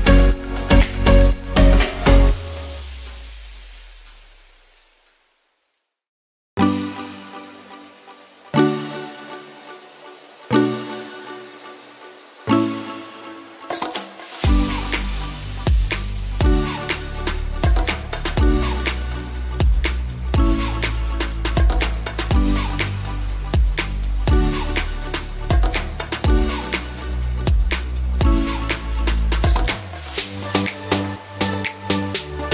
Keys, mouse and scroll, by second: 4.1 ctrl+alt+shift+z, 5.8 ctrl+z, 6.7 ctrl+z, 10.9 ctrl+z, 17.2 ctrl+z, 20.0 ctrl+z, 21.3 ctrl+z, 23.0 ctrl+shift+z, 23.7 ctrl+alt+shift+z, 25.0 ctrl+z, 25.8 ctrl+alt+shift+z, 26.0-27.0 typing, 29.0 ctrl+shift+z.